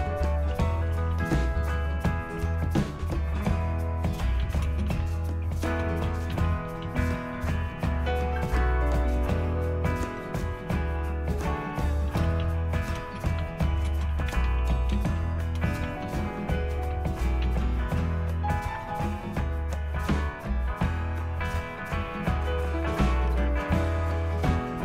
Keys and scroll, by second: 0.3-7.8 typing, 11.9-19.3 typing, 22.0 Return.